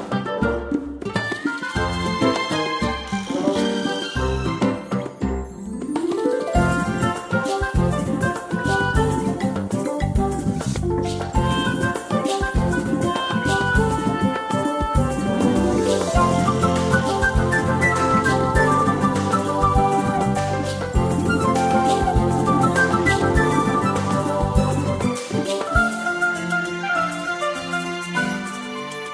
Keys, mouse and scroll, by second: 2.7 click, 9.3 Down, 13.6 ctrl+scroll up 1, 14.5 space, 18.1 ctrl+scroll up 1, 20.9 click, 26.7 click, 27.1 space.